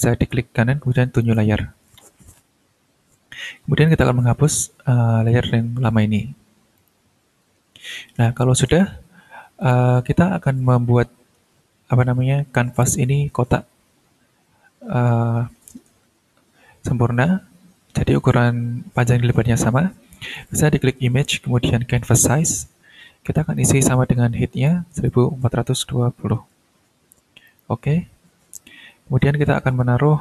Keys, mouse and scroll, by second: 1.2 click, 3.9 click, 6.8 click, 9.6 click, 20.3 click, 21.9 click, 23.2 click, 24.7 click, 25.0-26.5 typing, 27.4 click.